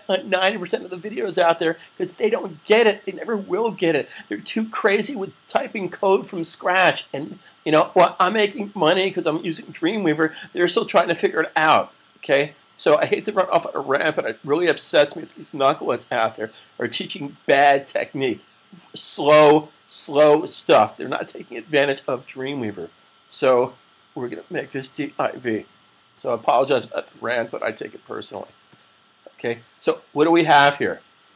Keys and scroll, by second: 24.5-24.9 typing, 25.9 typing.